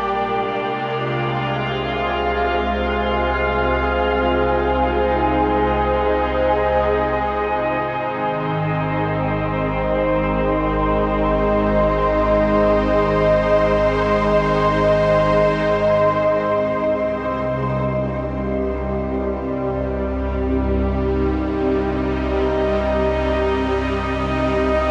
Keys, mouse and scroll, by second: 2.9 click, 3.1 scroll down 1, 3.6-5.2 typing, 3.9 click, 4.4 click, 4.7 click, 5.1 click, 5.4 click, 5.8 click, 7.1 right click, 8.0 click, 9.0 shift+click, 14.6-16.0 alt+shift+drag, 16.0-18.0 typing, 16.4 click, 16.9 click, 17.2 click, 17.9 click, 18.2 click, 19.6 scroll up 1, 20.8 scroll up 1, 20.8-21.1 typing, 22.1-24.9 drag, 24.6 typing.